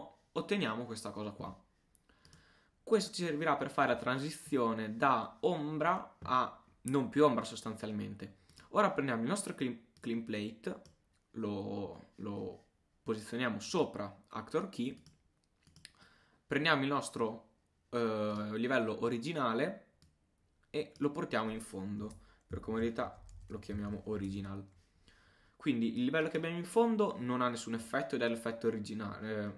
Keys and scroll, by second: 22.6 shift+Return, 22.7 shift+o, 23.0 shift+r.